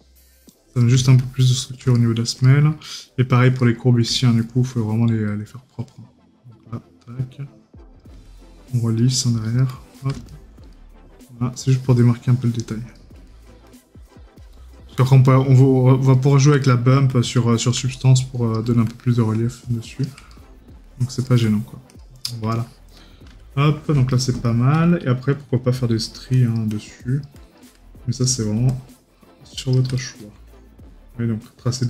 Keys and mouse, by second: 2.0 right click, 13.3 right click, 16.7 right click, 20.4 right click, 24.2 right click, 30.0 right click.